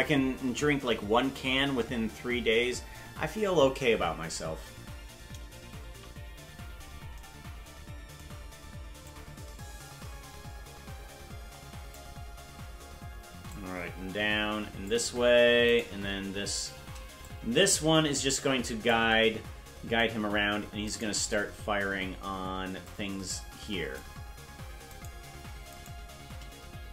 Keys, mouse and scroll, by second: 5.9 KP_Decimal, 6.4-6.9 scroll down 10, 9.1-12.0 drag, 13.5-14.9 drag, 15.9 right click, 17.2-18.9 drag, 21.0 right click, 22.8-24.0 drag, 25.1 right click, 25.9 shift+right click.